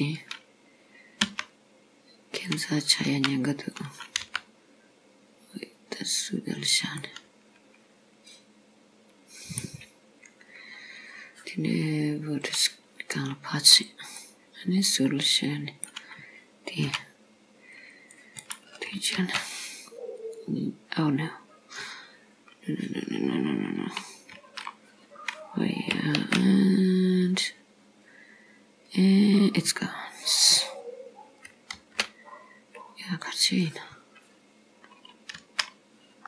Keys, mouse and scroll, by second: 1.3 e, 3.1 r, 4.3 g, 7.1 middle click, 10.1 scroll up 2, 10.8-12.5 scroll down 2, 12.5 click, 13.7 click, 14.2 middle click, 16.9 c, 19.2 alt+m, 24.4 ctrl+z, 26.3 alt+m, 31.9 alt+m, 35.4 ctrl+z.